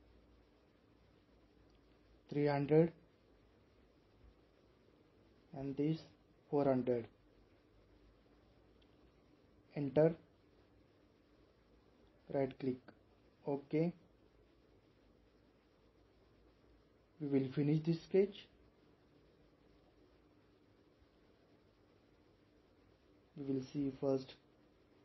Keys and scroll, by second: 2.1-2.9 typing, 6.0-6.9 typing, 9.5 Return.